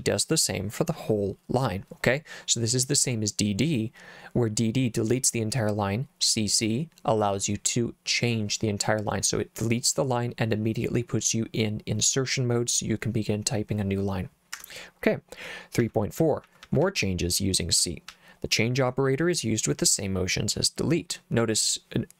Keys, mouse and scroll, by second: 14.6 Escape, 15.8-16.8 typing, 18.1 j.